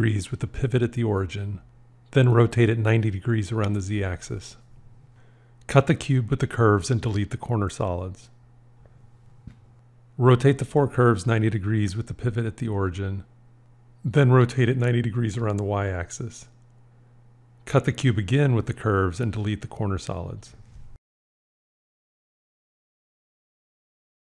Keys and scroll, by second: 2.4 r.